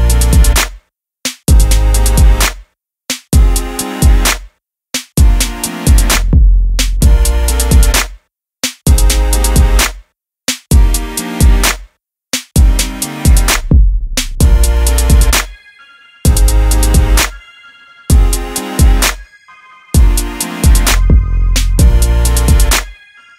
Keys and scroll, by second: 6.6 Return.